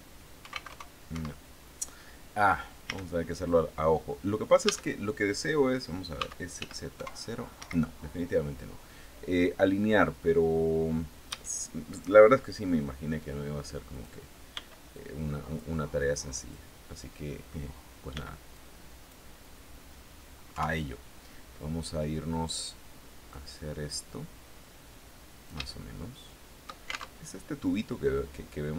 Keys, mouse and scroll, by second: 0.0-0.5 typing, 0.5 Escape, 2.3 a, 4.1 a, 5.6 s, 6.0 z, 6.4 KP_0, 10.7 a, 13.3 click, 14.0 b, 14.4 click, 15.8-17.1 middle drag, 17.6 b, 18.0 click, 20.0 KP_3, 22.8-25.1 drag, 25.2-26.3 shift+middle drag, 26.6 alt+shift+Tab.